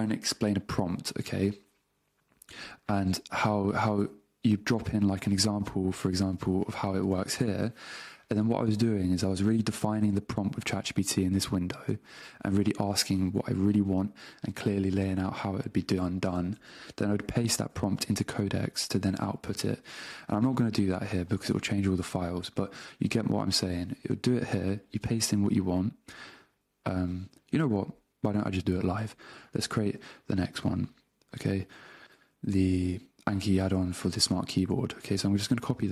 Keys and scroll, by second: 7.0 super+Tab, 9.5 super+Tab, 16.6 super+Tab, 34.7 super+c, 35.6 super+v.